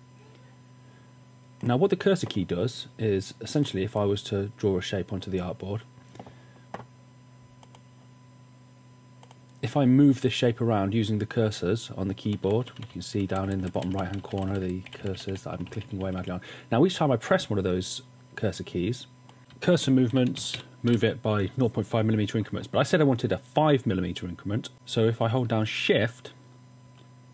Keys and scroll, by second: 12.3 Right, 12.4 Right, 12.6 Right, 12.7 Right, 12.9-16.5 typing, 19.4 Left, 19.4 Right, 19.7 Down, 20.2 Left, 20.3-21.9 typing, 26.9 shift+Right.